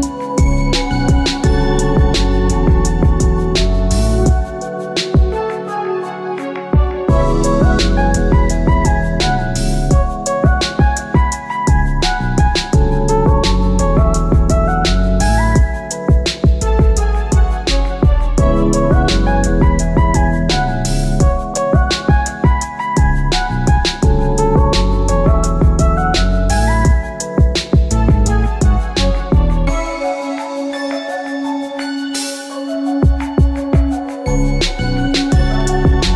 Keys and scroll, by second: 8.4 Return, 18.4 Return.